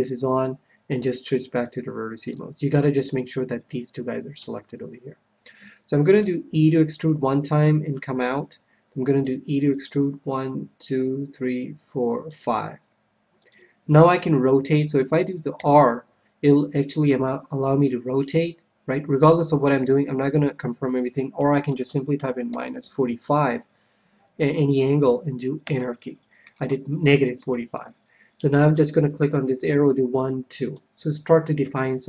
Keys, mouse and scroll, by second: 1.5-3.0 drag, 2.2-4.0 middle drag, 4.3 KP_1, 6.2 e, 8.3-9.9 drag, 9.2 e, 10.4 e, 13.4-15.2 drag, 15.5 r, 29.2-30.9 drag.